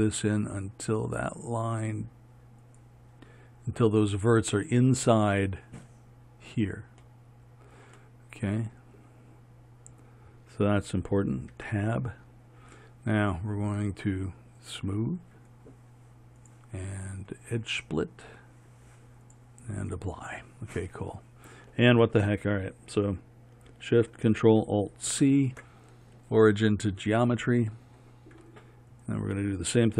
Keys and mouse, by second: 4.9-11.6 middle drag, 11.6 Tab, 14.8-25.2 drag, 25.2 ctrl+alt+shift+c, 29.0-29.9 right drag.